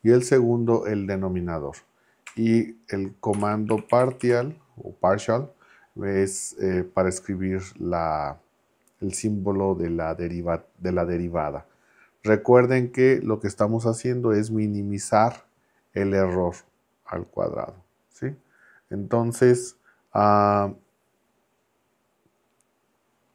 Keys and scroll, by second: 2.3-4.8 typing.